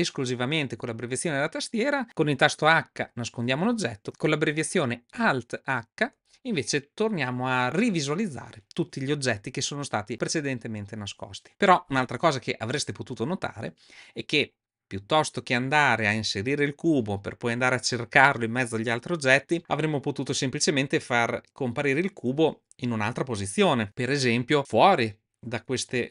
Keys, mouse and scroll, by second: 2.8 h, 5.9 alt+h.